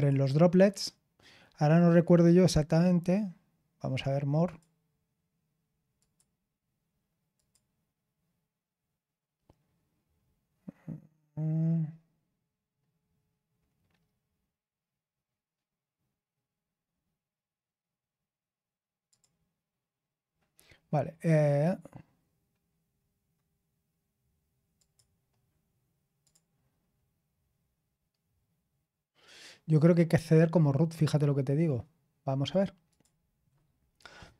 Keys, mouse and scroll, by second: 4.4 click, 5.9 click, 6.4 click, 19.0 click, 24.7 click, 26.2 click, 26.6-27.9 scroll down 2, 27.9 scroll down 1, 28.0-29.3 scroll up 1, 29.3-31.4 scroll up 1, 31.4-32.9 scroll up 1, 32.9 click.